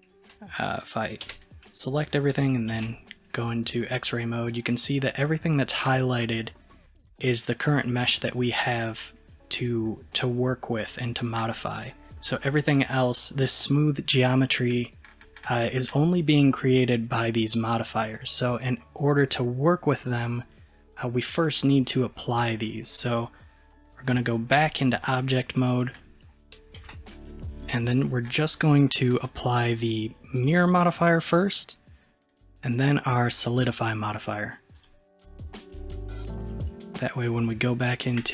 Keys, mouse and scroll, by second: 1.3 a, 2.8 alt+z, 3.5-6.7 middle drag, 7.2-8.4 middle drag, 8.4-8.7 scroll up 2, 8.7-11.4 middle drag, 11.6-11.9 scroll down 2, 11.9-13.3 middle drag, 24.7 Tab, 25.6-26.8 middle drag, 26.8 alt+z, 27.3-30.4 middle drag, 30.4-33.3 drag, 34.8-37.8 drag, 38.2 Tab.